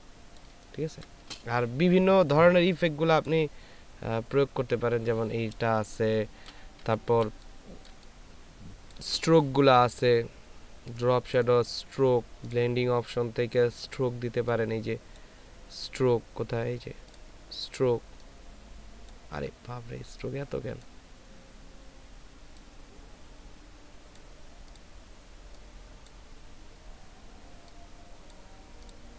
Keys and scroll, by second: 6.1 ctrl+space, 6.8 ctrl+space.